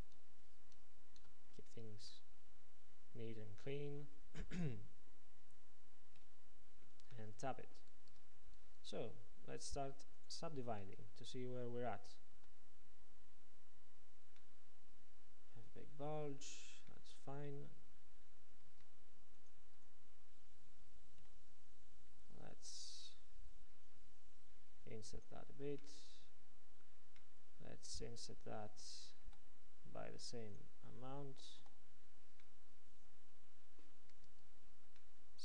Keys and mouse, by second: 6.3 f, 8.2 Tab, 12.4 ctrl+2, 16.4 Tab, 18.7 ctrl+Tab, 21.3 i, 29.3 F3, 31.7 Return, 34.3 Tab.